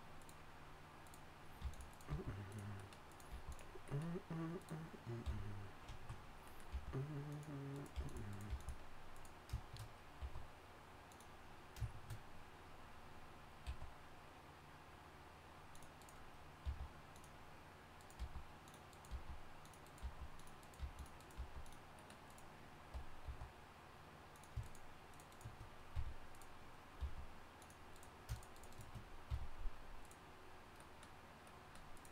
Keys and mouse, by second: 1.6 g, 2.1 g, 3.3 g, 5.2 f, 6.7 g, 7.9 g, 8.5 g, 10.2 e, 13.4 e, 13.7 e, 16.6 g, 18.2-21.4 typing, 23.2 e, 25.9 f, 27.0 g, 29.3 f.